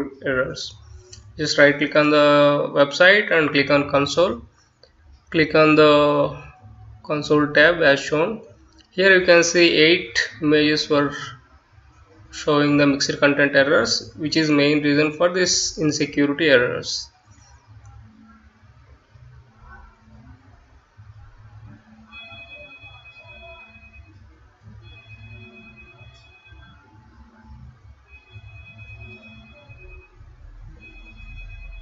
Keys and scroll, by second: 24.0 Return, 24.9-31.8 typing.